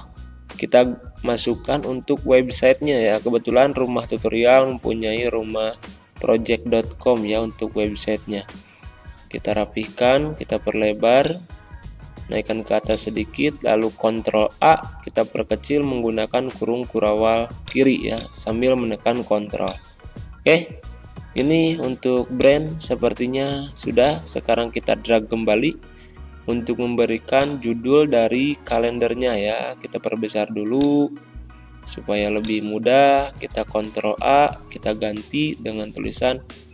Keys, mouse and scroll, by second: 0.1 ctrl+a, 1.4-6.6 typing, 8.7 typing, 8.9 click, 13.3 ctrl+a, 14.1 ctrl+[, 17.5-32.3 drag, 32.7 ctrl+a, 33.9-36.7 typing.